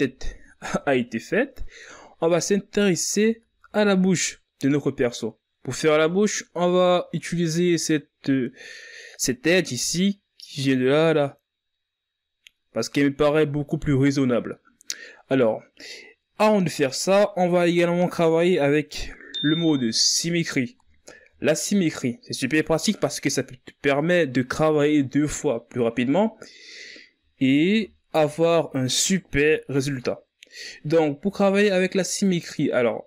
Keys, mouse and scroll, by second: 0.0 s, 0.4-2.2 shift+scroll down 6, 2.2 z, 2.6-4.0 scroll down 3, 4.0-5.0 shift+scroll up 2, 5.0-5.5 scroll up 5, 5.5 z, 8.4-9.0 shift+scroll down 1, 9.0-12.0 scroll up 1, 16.9-18.0 scroll down 3, 23.3-23.6 shift+scroll up 3, 29.7-31.4 ctrl+scroll down 4, 31.4-33.0 ctrl+scroll up 1.